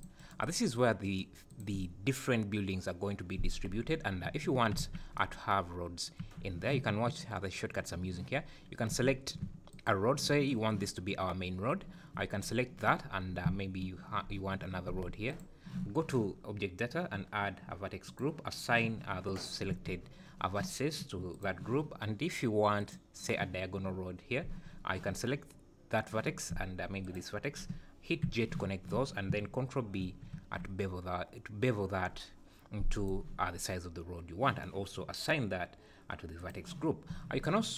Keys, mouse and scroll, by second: 0.2 right click, 1.0 right click, 4.2 `, 4.8 alt+a, 6.2 3, 8.4-8.9 scroll up 1, 8.9 3, 9.7 alt+click, 15.3 alt+shift+click, 18.0 click, 19.7 1, 21.3 click, 22.8 click, 27.0 shift+click, 28.2 j, 30.0 ctrl+b, 36.4 click, 37.1 Tab.